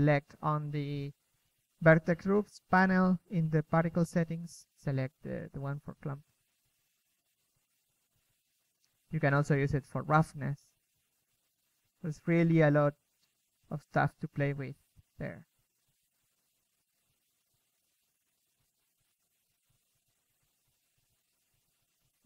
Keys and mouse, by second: 0.0 Escape, 0.5 click, 0.5 middle click, 0.8 KP_3, 2.1-3.0 drag, 3.7 middle click, 5.6 drag, 5.8-7.5 middle drag, 7.5 KP_3, 7.9 KP_0, 9.9-10.3 middle drag, 10.5 shift+b, 11.0 click, 13.6-14.0 drag, 14.0-14.8 middle drag, 14.8-16.5 drag, 16.5 KP_1, 18.8-20.4 drag, 20.5 KP_3.